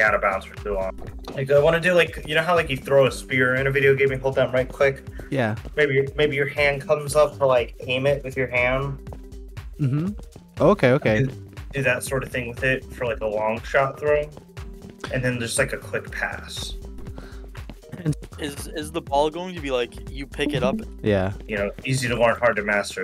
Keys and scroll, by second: 0.6 d, 2.1 w, 2.7 space, 4.0 w, 4.3 d, 9.4-11.2 typing, 12.3 d, 14.2-19.0 typing, 20.8-22.7 typing.